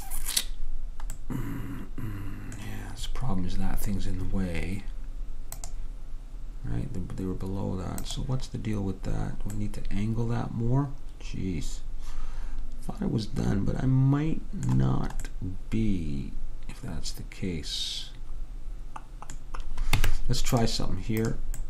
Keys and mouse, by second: 1.3-5.6 middle drag, 9.2-11.5 middle drag, 15.4-17.0 middle drag, 20.1 Tab, 20.7 Tab, 21.3-21.6 drag.